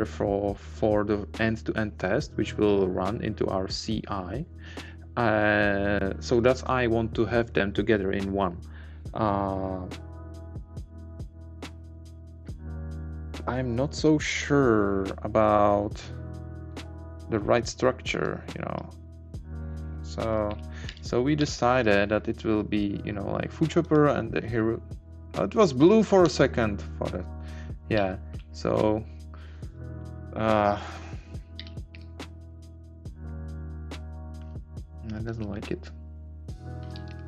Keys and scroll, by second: 31.6 Down, 32.3 Right, 34.4 Left, 35.2 Left, 35.2 Up, 35.3 Right, 36.8 Down.